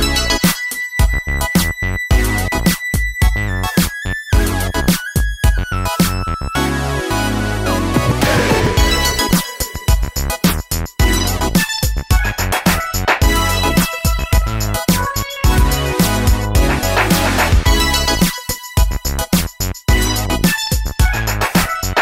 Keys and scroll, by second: 14.1 3, 14.2 Return.